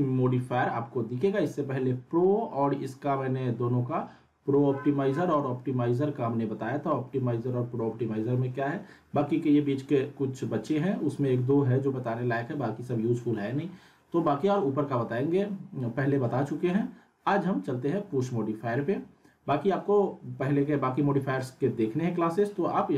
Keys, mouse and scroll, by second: 4.3-5.3 scroll up 1.